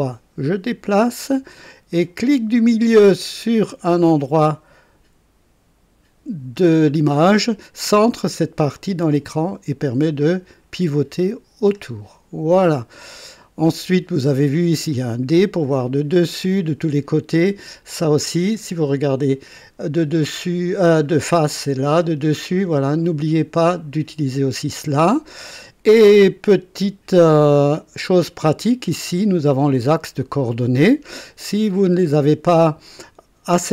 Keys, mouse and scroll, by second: 6.5 middle click, 8.7-13.8 drag, 13.0 right click, 14.4 click, 15.8 click, 18.1 click, 21.9 click, 22.5 click, 23.0 click, 23.6 click, 24.6 click, 27.5-29.0 drag, 29.0 click, 31.4 click.